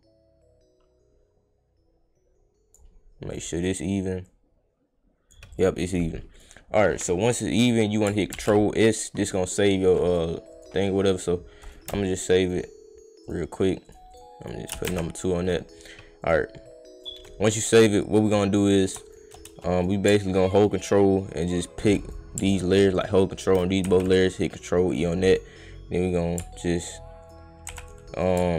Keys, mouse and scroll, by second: 3.6 click, 4.3 click, 6.3 click, 8.3 ctrl+s, 10.0 click, 11.6 click, 12.4 click, 13.2 click, 13.8 click, 14.1 click, 14.4 click, 14.7 space, 15.1 click, 16.2 click, 17.0 click, 17.8 click, 19.0 shift+click, 19.8 click, 20.5 ctrl+click, 21.3 ctrl+click, 22.0 click, 22.9 ctrl+click, 23.8 ctrl+d, 24.9 click, 25.3 click, 27.2 ctrl+click, 27.7 ctrl+e, 28.1 click.